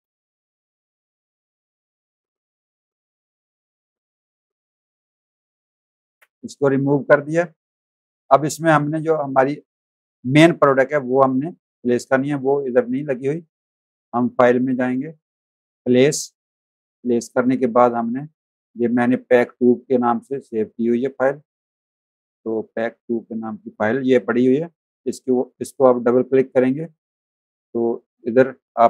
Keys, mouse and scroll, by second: 0.7 alt+click, 3.5 z, 3.7 alt+click, 4.7 v, 5.1 click, 6.1 Delete, 6.5 click, 6.9 space, 7.0 click, 8.6 z, 8.8 click, 9.5 space, 9.6 click, 10.6 v, 14.3 click, 16.2 click, 18.5 click, 19.2 scroll down 1, 21.7 click, 22.8-23.2 scroll down 1, 25.0 click, 27.8 click.